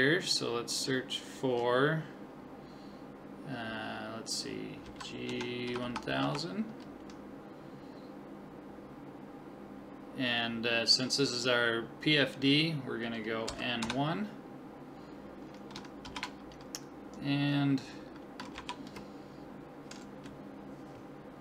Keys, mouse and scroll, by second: 0.8-2.4 drag, 5.9 0.